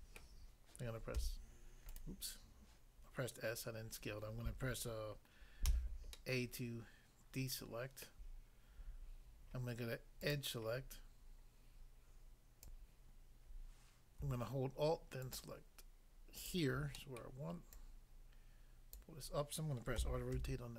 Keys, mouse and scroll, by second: 0.2 middle click, 1.1 s, 1.8 right click, 1.9 right click, 5.7 a, 6.1 middle click, 8.0 middle click, 10.3 click, 10.3 click, 12.6 click, 12.7 click, 15.3 alt+click, 16.4 alt+click, 16.9 middle click, 17.2 middle click, 17.7 alt+click, 18.9 click, 20.0-20.3 typing.